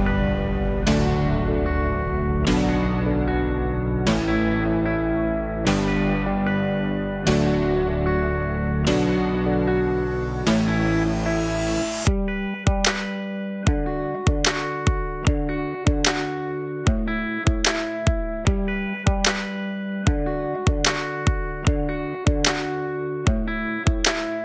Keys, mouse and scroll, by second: 2.3 click, 4.0 click, 5.6-9.5 drag, 10.2-12.6 alt+drag, 13.6 KP_7, 15.3 shift+d, 19.0 alt+r, 23.0 KP_3, 23.7-24.4 scroll up 5.